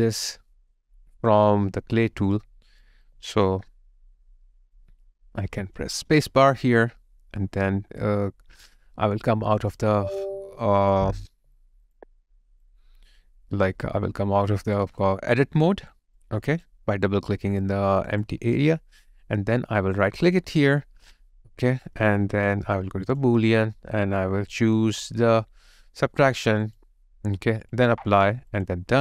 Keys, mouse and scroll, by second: 3.0 alt+click, 3.7 alt+middle click, 9.8 double click, 11.2 double click, 11.4 alt+right click, 15.0 alt+click, 17.6 alt+click, 17.9 alt+right click, 18.2 alt+click, 20.1 right click.